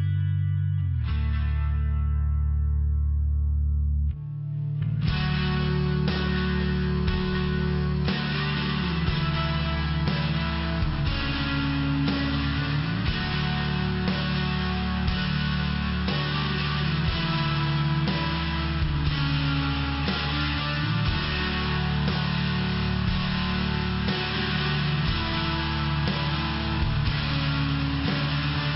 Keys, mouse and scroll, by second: 0.0 click, 0.9 click, 1.1 click, 1.5 click, 1.6 click, 2.1 click, 2.2 click, 2.9 click, 3.4 click, 3.5 click, 3.9 click, 4.0 click, 4.4 click, 4.6 click, 5.0 click, 5.2 click, 5.6 click, 5.7 click, 6.2 click, 6.3 click, 6.6 click, 9.3 click, 10.3 click, 10.8 click, 10.9 click, 11.3 click, 11.5 click, 11.9 click, 12.0 click, 13.8 click, 15.7 click, 16.3 click, 16.5 click, 16.9 click, 17.7 click, 17.7 click, 17.9 click, 18.3 click, 18.8 click, 18.9 click, 19.4 click, 19.5 click, 20.0 click, 20.2 click, 20.6 click, 20.7 click, 21.4 click, 21.9 click, 22.5 click, 23.4 click, 23.6 click, 24.0 click, 24.2 click, 24.6 click, 25.4 click, 25.5 click, 25.9 click, 26.0 click, 26.4 click, 26.5 click, 27.0 click, 27.1 click, 27.6 click, 28.5 click.